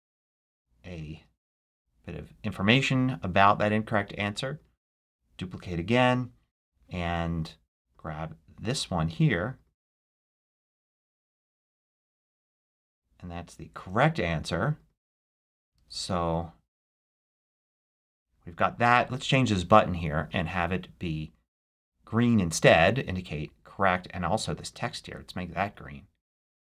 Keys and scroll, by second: 1.0 super+a, 4.8 super+d, 10.2 super+c, 12.6 super+a, 12.7 super+v, 15.6 super+c, 16.9 super+a.